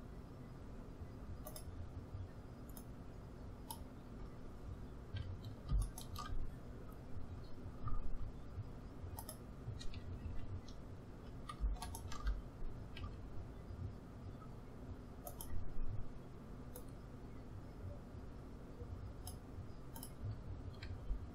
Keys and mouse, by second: 2.7-4.7 drag, 4.1 a, 7.8 r, 10.2 a, 12.9 s, 16.7-18.6 drag, 19.9-21.3 drag, 20.8 s.